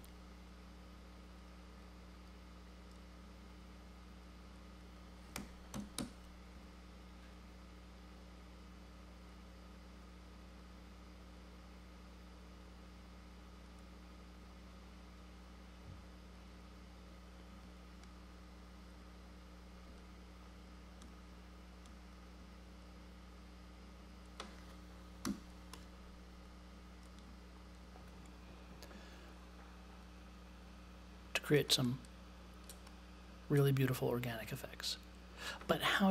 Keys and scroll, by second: 0.0-0.3 typing, 5.1-6.5 typing, 25.2 0.